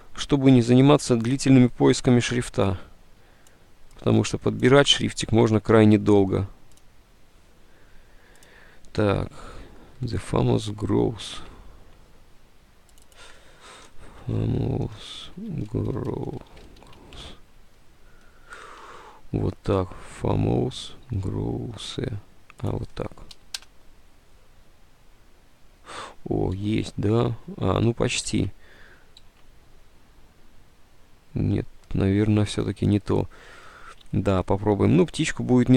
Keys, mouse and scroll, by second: 11.3 alt+Tab, 13.6-15.8 typing, 17.2 Return, 18.9 alt+Tab, 19.7-20.4 typing, 21.1 alt+Tab, 23.4 Delete, 23.4 alt+Tab, 23.7 Return, 25.1 alt+Tab, 26.6 alt+Tab, 26.7 Delete, 27.3 Tab, 27.3 Delete, 28.4 alt+Tab, 28.5 alt+Tab, 29.4 Tab, 33.7 alt+Tab.